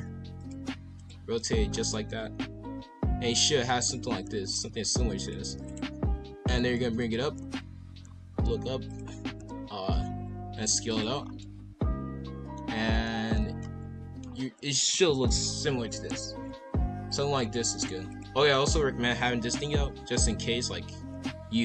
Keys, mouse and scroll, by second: 0.0 r, 0.5 g, 1.2-1.8 scroll down 2, 1.4-1.7 middle drag, 2.1-4.1 middle drag, 4.1-5.8 typing, 4.5 scroll up 1, 6.7-7.2 middle drag, 7.2-10.0 typing, 8.0 scroll up 2, 9.6 scroll down 2, 11.2 scroll down 4, 11.4-12.7 middle drag, 12.7 scroll up 4, 13.0-14.2 middle drag, 14.2 scroll down 2, 15.3 click, 16.3 b, 17.6 g.